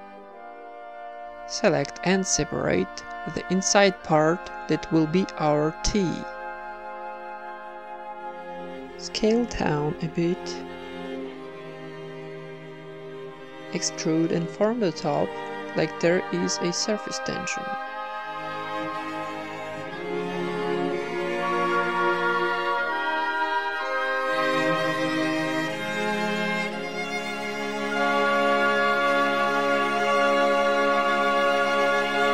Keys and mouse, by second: 0.1-1.9 typing, 0.9 Tab, 0.9 ctrl+w, 1.0 right click, 1.5 Tab, 1.7 Tab, 2.4 right click, 3.4 ctrl+KP_Add, 3.6 ctrl+KP_Add, 3.7 ctrl+KP_Add, 3.9 ctrl+KP_Add, 4.1 ctrl+KP_Add, 4.3 ctrl+KP_Add, 5.4 shift+d, 6.1 p, 6.4 Tab, 7.0 z, 7.3-8.3 right drag, 7.7 Tab, 7.9 a, 8.3 alt+s, 9.4 Tab, 11.8 middle click, 12.1 z, 12.3-13.9 middle drag, 13.3 Tab, 13.9-14.8 typing, 14.4-15.4 right drag, 16.1 click, 17.1 o, 17.2 s, 19.0-22.1 typing, 19.3-20.3 right drag, 19.6 Tab, 20.3-21.3 middle drag, 20.5 Tab, 21.3 ctrl+n, 21.7 click, 23.3 click, 23.9 ctrl+r, 25.0 a, 25.2 right click, 25.8 n, 26.0 alt+s, 26.9 s, 27.5 e, 27.7 s, 28.6 alt+s, 29.5 s, 30.3 e, 30.6 alt+m, 31.4 ctrl+Tab, 31.7-32.3 drag, 31.9 alt+s.